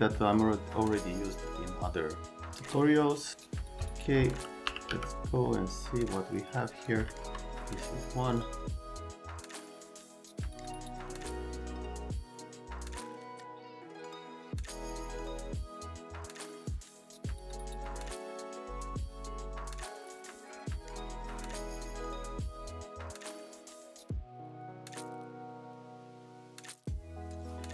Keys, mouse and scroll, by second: 3.3 right click, 3.9 click, 4.4-5.4 typing, 6.4 middle click, 7.1 alt+middle click, 7.6 middle click, 8.3 click, 8.6 middle click, 8.9 click, 9.3 click, 9.9 c, 10.1 right click, 10.4 click, 10.7 click, 11.0 right click, 11.1 click, 12.0 click, 12.2 click, 13.0 click, 13.4 scroll, 13.7 click, 13.9 click, 14.6 scroll, 14.6-17.2 typing, 14.7 click, 17.1 right click, 17.2 click, 17.4 alt+middle click, 17.7 click, 17.8 click, 18.1 click, 18.2 scroll down 1, 18.4 alt+middle click, 18.7 click, 18.9 alt+middle click, 19.2 click, 19.7 alt+middle click, 20.4 alt+middle click, 20.6 middle click, 21.0 click, 21.2 c, 21.6 click, 22.5 click, 22.5-24.9 typing, 22.9 middle click, 23.2 middle click, 23.5 click, 24.6 click, 24.8 right click, 24.9 click, 25.3 middle click, 25.9 right click, 26.2 shift+click, 26.7 click, 26.9 click, 27.5 click.